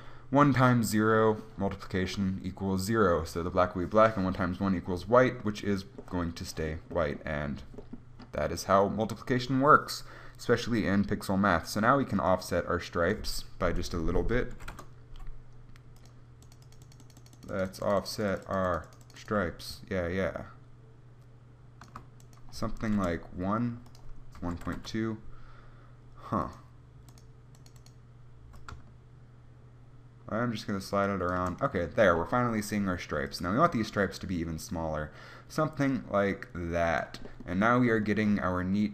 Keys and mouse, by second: 12.5-30.6 drag, 34.1-38.9 drag.